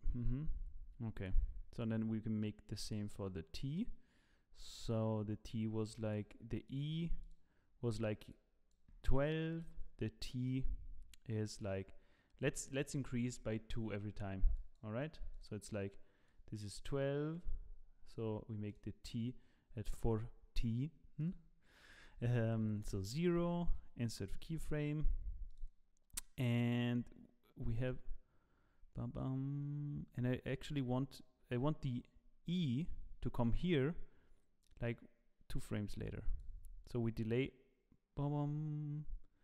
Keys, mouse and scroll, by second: 1.7 click, 2.7 click, 6.6 click, 7.2 click, 9.0 click, 9.6 click, 12.7 click, 14.5 click, 15.3 click, 16.8 click, 18.7 click, 21.9 click, 24.4 i, 25.5 click, 26.6 click, 32.7 click, 34.6 click, 38.1 click.